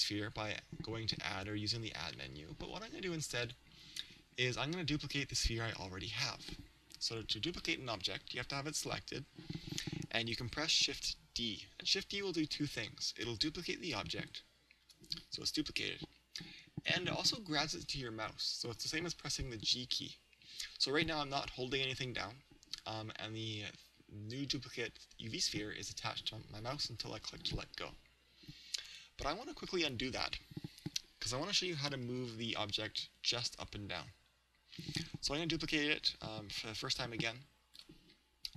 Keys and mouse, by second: 2.2 shift+a, 14.9 shift+d, 33.6 ctrl+z, 33.6 click, 37.8 shift+d.